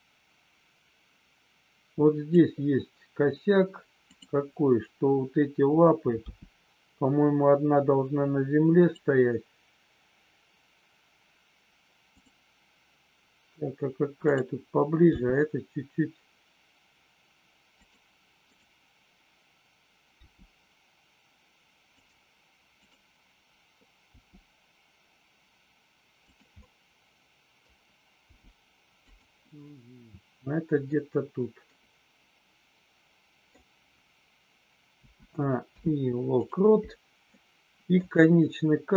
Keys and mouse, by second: 4.1 click, 6.2 g, 8.7 click, 14.2 click, 17.8 click, 22.8 click, 26.4-27.5 middle drag, 28.3 g, 29.1 click, 29.5-30.8 middle drag, 31.7-33.5 middle drag, 35.5 i, 37.3 middle click.